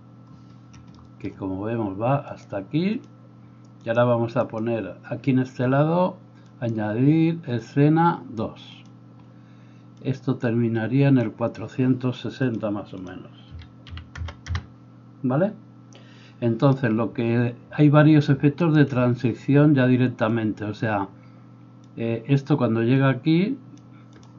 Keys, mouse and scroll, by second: 3.2-13.0 middle drag, 13.0-24.3 drag, 16.5-18.9 middle drag, 16.5 right click, 18.6 shift+right click.